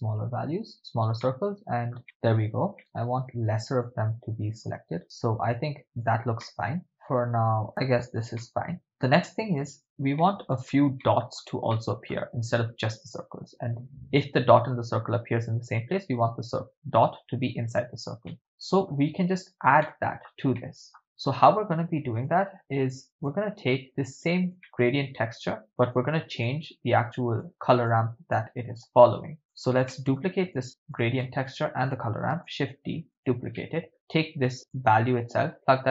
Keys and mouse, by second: 1.3-2.0 shift+middle drag, 3.8 click, 6.4 middle click, 6.9 click, 8.5-8.8 middle drag, 10.3-10.7 ctrl+middle drag, 11.0-11.4 middle drag, 11.7-12.1 ctrl+middle drag, 18.3 middle click, 19.8-20.3 ctrl+middle drag, 20.6 middle click, 22.3-23.3 drag, 23.9 click, 24.6 ctrl+middle click, 25.6 click, 26.5 click, 27.6 middle click, 28.4 click, 29.4 drag, 29.9 middle click, 31.0 click, 31.5 shift+click, 32.4 shift+d, 33.1 click, 33.6-33.9 middle drag, 34.8 click, 35.5 click.